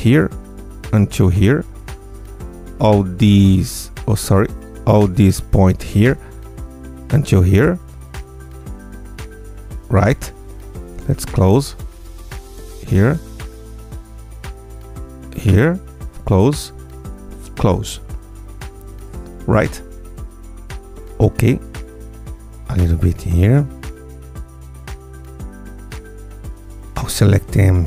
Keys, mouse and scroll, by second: 1.7 click, 2.5-3.8 drag, 4.0 g, 4.7 ctrl+click, 4.9 ctrl+z, 5.7-6.9 drag, 7.1 g, 11.0 click, 11.4 click, 12.1-13.3 drag, 13.5-14.7 drag, 14.9 click, 15.8 click, 16.9 click, 18.0 click, 19.1 click, 21.1 Tab, 21.9 Tab, 22.5 click, 23.4 click, 24.4 click, 25.2 Tab, 26.8 ctrl+a.